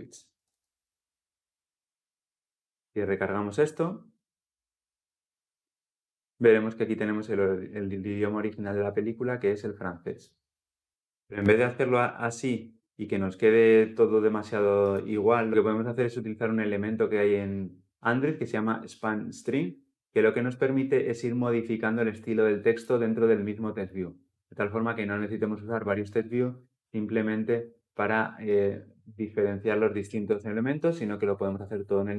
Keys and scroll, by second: 0.2 ctrl+alt+l, 0.3 ctrl+alt+o, 2.8 ctrl+F10.